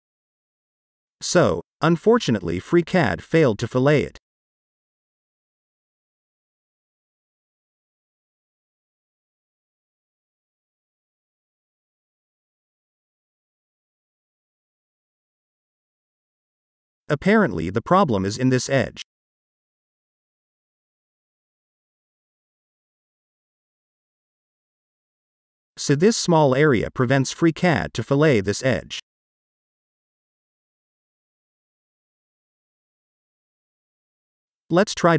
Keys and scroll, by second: 32.4 Delete.